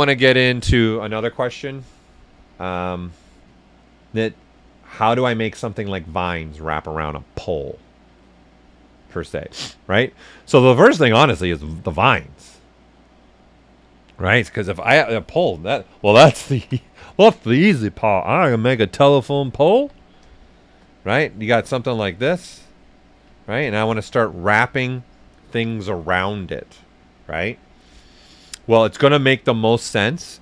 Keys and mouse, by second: 14.8 click, 16.1 ctrl+right click, 17.7 shift+f, 19.3 click, 19.8 w, 20.3 shift+right click, 21.2 click, 21.9 ctrl+right click, 22.6 click, 23.3 ctrl+right click, 24.0 q.